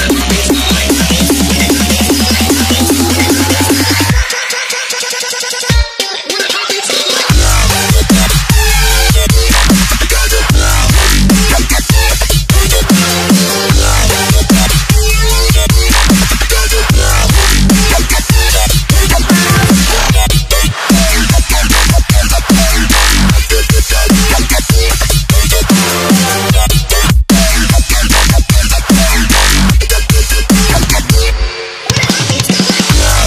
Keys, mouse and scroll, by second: 0.3 click, 0.4 right click, 0.9 click, 1.4 alt+scroll up 1, 2.1 click, 3.2 c, 3.4 click, 5.0 ctrl+v, 5.7 click, 6.3 click, 6.7 ctrl+c, 7.4 click, 8.0 ctrl+v, 8.6 click, 11.4 click, 14.9 alt+Tab, 15.6 click, 16.0 ctrl+c, 16.1 click, 16.4 ctrl+v, 16.8 click, 21.1 click, 21.4 alt+scroll down 1, 21.7 alt+scroll up 1, 21.9 scroll down 1, 22.1 click, 23.1 KP_Add, 23.5-25.4 typing, 24.4 Return, 24.5 KP_Add, 25.9 click, 26.7 alt+scroll down 1, 27.2 click, 28.3 Tab, 28.9 click, 29.3 c, 29.7 v, 30.0 Return, 30.7 click, 31.0 c, 31.1 Tab, 31.5 v, 32.0 click.